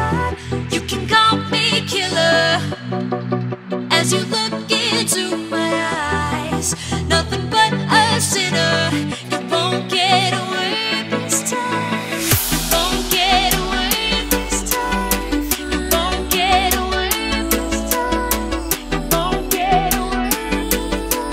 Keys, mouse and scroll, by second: 3.0 click, 3.2 Delete, 3.5 click, 5.8 alt+Tab, 6.4 click, 6.8 ctrl+c, 7.0 alt+Tab, 8.0-9.1 typing, 10.4 click, 11.0 Tab, 11.8 click, 12.5 c, 12.7 Tab, 14.4 click, 18.9 click.